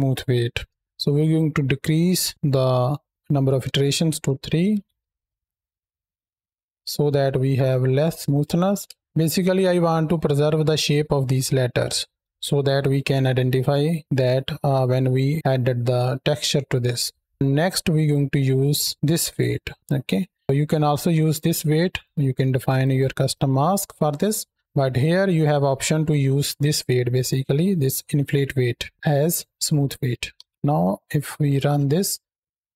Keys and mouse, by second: 0.7 shift+middle click, 1.7-4.2 drag, 4.6 shift+Left, 4.9 space, 6.5 shift+middle drag, 7.2-8.2 middle drag, 8.7 space, 9.3-9.9 middle drag, 10.3-10.9 middle drag, 11.6 shift+middle click, 19.0 click, 20.7-21.8 drag, 30.2 shift+Left, 31.4 space, 32.3-32.7 drag.